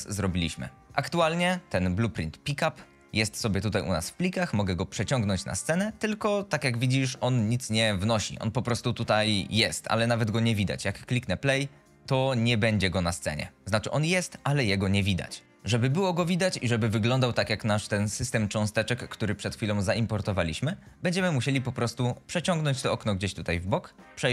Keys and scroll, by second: 11.9 d, 12.2 w, 14.8 shift+Escape.